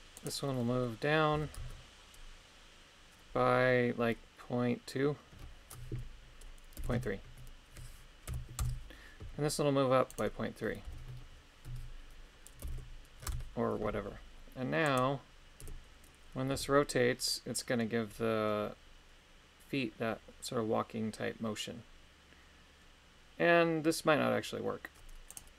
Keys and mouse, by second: 0.1 right click, 1.3 g, 1.6 z, 6.9 KP_3, 8.3 KP_Subtract, 8.6 Return, 10.1 right click, 10.8 g, 11.6 z, 12.6 ., 12.7 KP_3, 13.3 Return, 14.8 right click, 15.6 KP_3, 16.5 r.